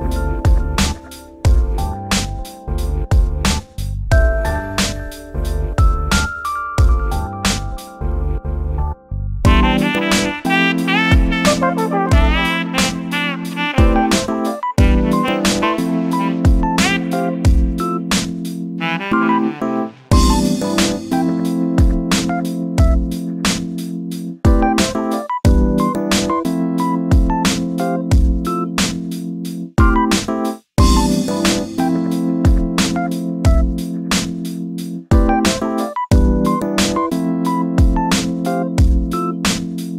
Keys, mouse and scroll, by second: 3.4 shift+middle click, 4.2 shift+d, 7.5-9.4 typing, 9.8 shift+middle click, 10.5 shift+r, 10.7 shift+r, 11.2 shift+middle click, 11.8 shift+r, 11.9 shift+r, 12.2 shift+middle click, 12.5 1, 13.1 click, 14.0 g, 16.8 scroll down 2, 16.9 shift+middle click, 17.4-18.0 scroll up 5, 18.0 shift+middle click, 18.2-18.9 scroll down 1, 18.9 click, 20.3 shift+d, 22.8 click, 24.9 3, 25.0 click, 25.9 shift+d, 28.9 g, 32.0 click, 32.4 click, 32.6 1, 33.2 click, 33.5 click, 34.3 click, 35.4 g, 39.7 3, 39.8 click.